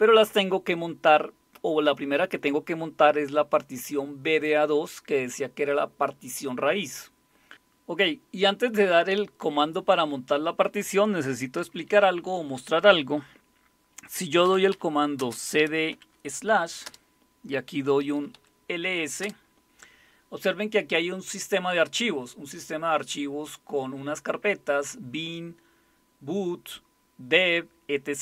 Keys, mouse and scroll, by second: 14.4-15.9 typing, 16.9 Return, 17.9-19.2 typing.